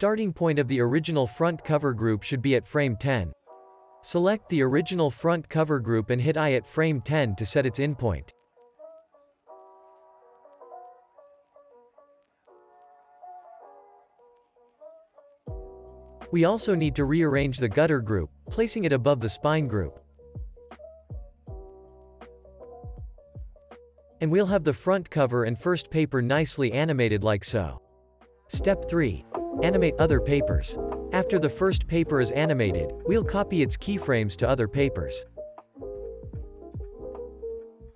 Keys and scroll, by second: 6.2 i, 9.3 space, 10.7 space, 12.2 space, 13.3 space, 19.0 super+[, 19.5 super+[, 20.7 super+s, 22.3 space, 24.4 super+s, 25.5 space, 26.7 space, 33.8 super+c, 37.5 super+v.